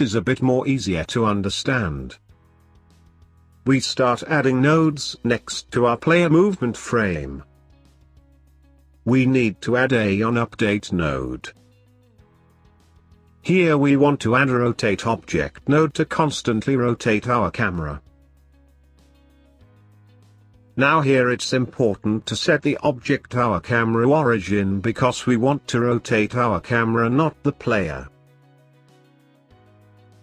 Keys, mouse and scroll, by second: 0.2 n, 1.5 middle click, 2.7 middle click, 3.2-3.9 scroll up 5, 3.9 middle click, 4.7-7.2 scroll up 2, 7.2 shift+a, 13.1 click, 13.2 shift+a, 17.9 scroll up 2, 18.0-19.1 middle drag, 19.2 click, 20.4 click, 24.4-25.2 scroll up 3, 25.2 click, 27.2 click, 27.2 middle click.